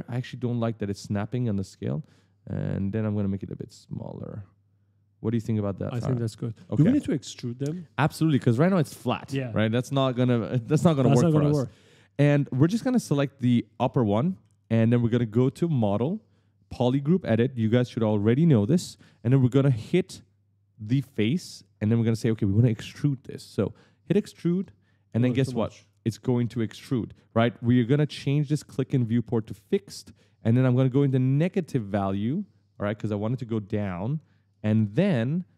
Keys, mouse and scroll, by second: 0.9 click, 2.4 click, 6.1-7.7 typing, 6.3 right click, 10.8-12.7 typing, 10.9 right click, 13.2 click, 13.9 right click, 15.6 click, 18.4 click, 21.0 click, 24.1 click, 28.0 click, 29.2 click, 30.6 click, 32.7-34.1 typing, 32.8 right click.